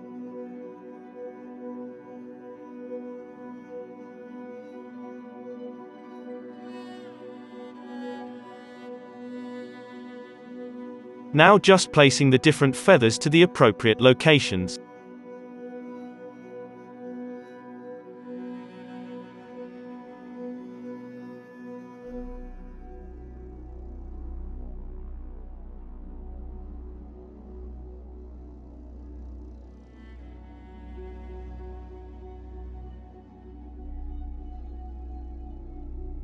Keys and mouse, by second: 0.4 Tab, 0.6 alt+a, 0.7 click, 0.9 Tab, 1.1-13.2 typing, 1.4 Tab, 1.5 middle click, 1.6 alt+a, 1.8 click, 2.0 middle click, 2.3 click, 2.4 middle click, 2.9-5.0 drag, 4.3 Tab, 5.4 Tab, 5.6 alt+a, 5.9 Tab, 6.7 Tab, 6.8 Tab, 7.3 Tab, 7.5 Tab, 8.0 alt+a, 8.0 click, 10.1 click, 11.2 Tab, 11.4 click, 11.8 Tab, 12.3 Tab, 12.6 Tab, 14.2-24.5 typing, 14.5 click, 14.6 middle click, 16.0 click, 16.9 click, 17.5 ctrl+z, 17.6 click, 18.8 middle click, 20.6 alt+a, 20.6-21.7 drag, 21.0 alt+a, 24.2 alt+a, 24.8-26.1 drag, 26.1-31.9 typing, 27.5 ctrl+z, 27.9 middle click, 28.4-29.9 drag, 29.0 alt+a, 29.9 middle click, 30.0 alt+a, 30.1-31.1 drag, 30.4 alt+a, 31.1 middle click, 31.3 alt+a, 31.6 click, 32.8-35.4 drag, 34.1-36.2 typing, 34.4 alt+a, 34.8 alt+a.